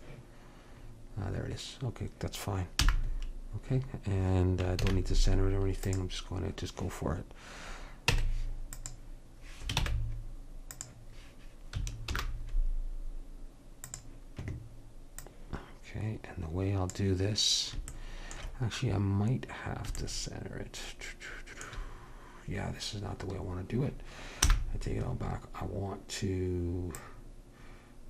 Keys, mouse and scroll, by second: 0.0-2.3 drag, 2.9 n, 4.8 shift+a, 8.1 Tab, 9.8 ctrl+Tab, 12.2 alt+m, 15.3-17.2 drag, 18.0-19.7 middle drag, 24.5 n.